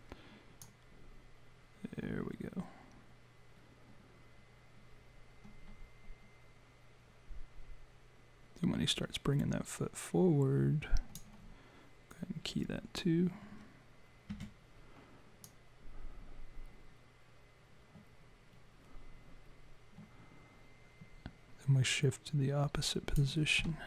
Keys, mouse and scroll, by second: 0.6 click, 14.3 s, 15.4 click.